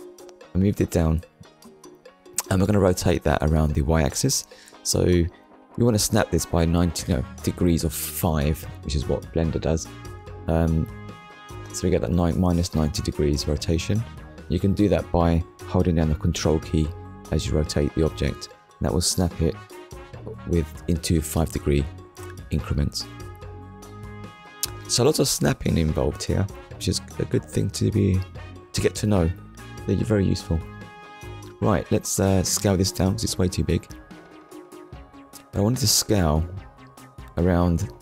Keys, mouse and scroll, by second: 2.0 click, 3.9 click, 8.2 click, 12.5 click, 13.9 KP_0, 14.3 Return, 16.1 middle click, 18.4 KP_1, 19.9 click, 20.7 scroll up 1, 21.6-22.0 scroll up 1, 22.3 click, 26.2 Tab, 27.4 click, 32.9 right click, 35.4 click, 37.5 click.